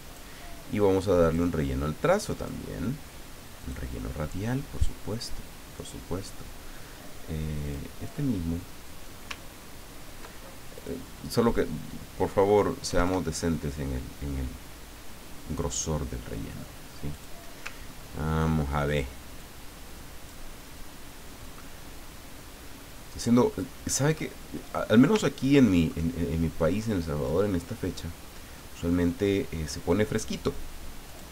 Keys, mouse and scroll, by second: 1.2 click, 2.2 click, 3.6 click, 7.6 click, 9.6 ctrl+scroll up 2, 10.7 click, 12.9 KP_1, 13.0 KP_Enter, 17.1 click, 17.8-18.1 ctrl+scroll up 2, 19.3 click, 21.4-23.2 drag, 23.5-24.5 middle drag, 25.1 ctrl+middle click, 27.3-29.0 drag, 31.1 click.